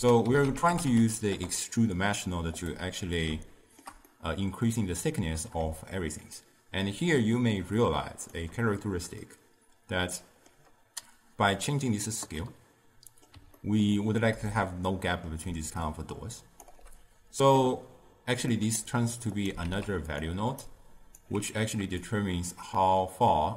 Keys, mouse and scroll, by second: 0.0 ctrl+a, 3.5-5.8 shift+middle drag, 6.1-9.2 shift+drag, 9.3-12.3 middle drag, 12.5-14.0 middle drag, 14.0-14.6 scroll down 2, 14.6-15.5 middle drag, 15.5 d, 15.9 click, 16.7 d, 18.6-19.4 middle drag, 19.4 click, 19.7 shift+d, 20.7-22.1 alt+right drag, 22.1-23.5 shift+drag.